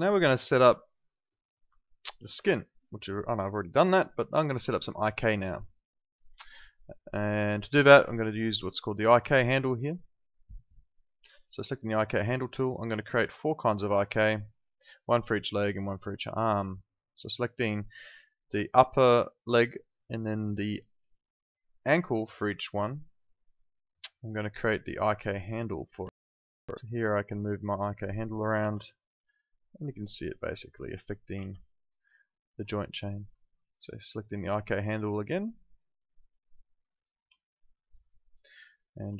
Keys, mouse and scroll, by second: 0.0 alt+click, 4.8 alt+click, 5.2 alt+middle click, 5.4 alt+right click, 5.7 alt+click, 11.6 click, 12.6 alt+middle click, 12.9 alt+right click, 13.2 alt+click, 18.7 click, 21.8 click, 25.1 alt+click, 25.3 alt+right click, 25.6 alt+middle click, 25.8 alt+right click, 26.1 w, 27.5 click, 28.7 z, 28.8 alt+click, 31.3 ctrl+z, 31.6 alt+click, 31.9 alt+right click, 32.1 alt+middle click, 34.5 click, 37.4 alt+click, 37.7 alt+middle click, 38.0 alt+right click, 38.4 alt+middle click, 38.6 alt+right click, 38.9 alt+click.